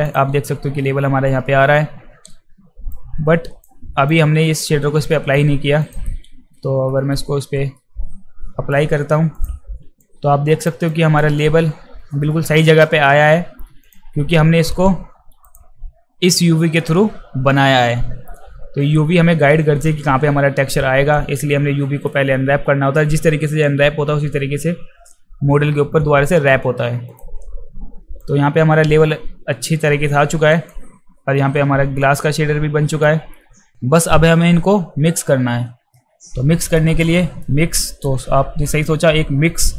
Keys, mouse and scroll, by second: 0.1 click, 2.9-3.6 drag, 4.1 click, 5.1 alt+middle click, 5.8 click, 6.9 alt+middle click, 7.7 middle click, 10.0 alt+click, 10.9-12.8 alt+drag, 13.8 click, 15.4 click, 27.1 click, 28.2-30.7 alt+drag, 32.0-33.0 middle drag, 35.9 alt+middle click, 37.0 alt+middle click, 37.7 alt+middle click, 38.7 alt+middle drag.